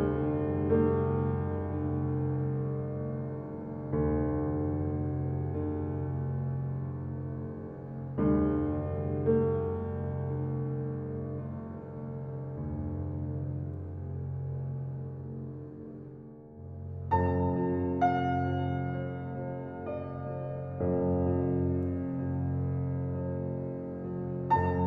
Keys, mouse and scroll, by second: 0.3 click, 2.5 drag, 5.1 click, 6.6 g, 11.0-12.4 drag, 18.5 click, 19.0 click, 19.7-20.4 middle drag, 20.4 scroll down 2, 20.6-21.8 middle drag, 22.6-23.1 drag, 23.1-23.8 scroll down 1, 23.8-24.8 drag.